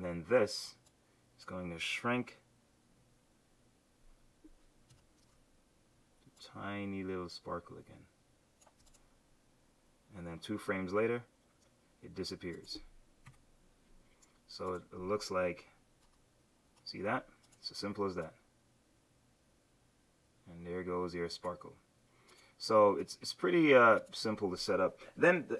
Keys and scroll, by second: 4.9 q, 13.3 F7, 16.0 Return.